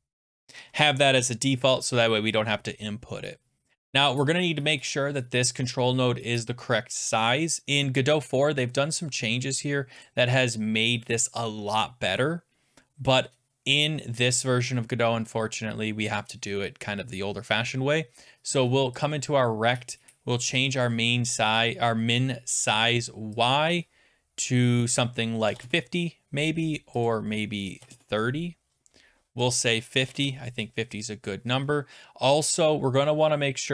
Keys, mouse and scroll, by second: 19.2 click, 20.7 click, 23.5 click, 25.2-26.0 typing, 27.1 click, 27.4-28.3 typing, 29.3-30.5 typing, 29.5 click, 32.1 Return, 32.6 click.